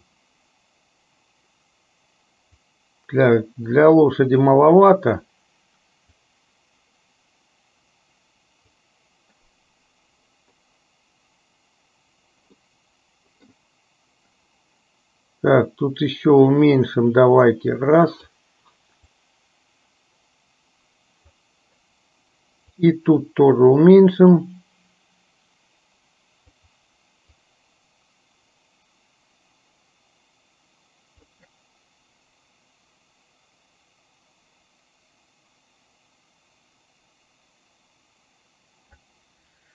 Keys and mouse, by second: 2.8-4.7 drag, 6.4-9.0 drag, 12.8 middle click, 15.6-18.4 drag, 19.3-21.5 drag, 22.9 click, 24.5-26.7 drag, 27.6-31.4 drag.